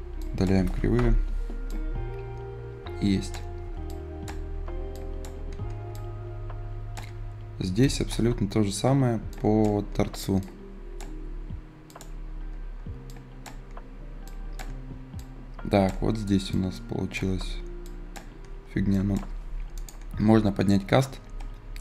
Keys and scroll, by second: 0.8 Delete.